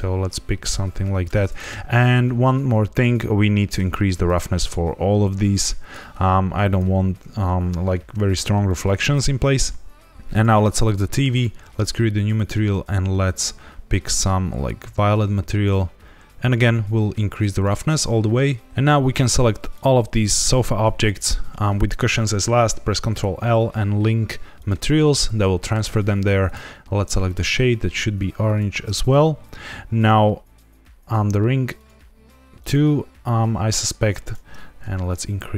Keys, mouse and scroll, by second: 2.9 click, 4.2 click, 5.4 click, 6.6 click, 10.2 click, 11.2 click, 12.3 click, 16.3 click, 18.7 ctrl+s, 18.7 click, 19.0 click, 19.7 shift+click, 20.3 shift+click, 20.9 shift+click, 22.9 ctrl+l, 26.4 click, 27.2 click, 29.9 click, 31.7 click, 33.0 click, 34.1 click, 35.0 shift+click.